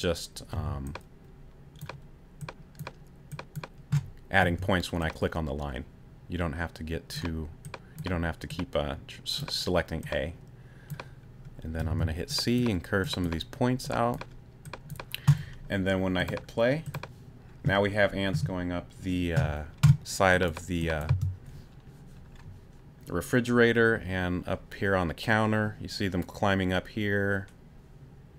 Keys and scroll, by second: 0.5 t, 4.4 a, 11.9 c, 21.1 space.